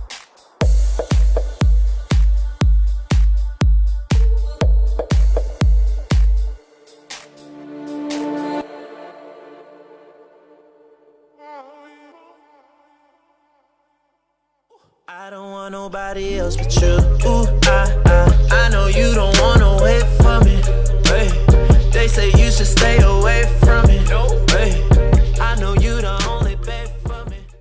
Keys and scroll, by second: 5.5 ctrl+=, 6.5 ctrl+=, 7.8 ctrl+=, 15.9 ctrl+-.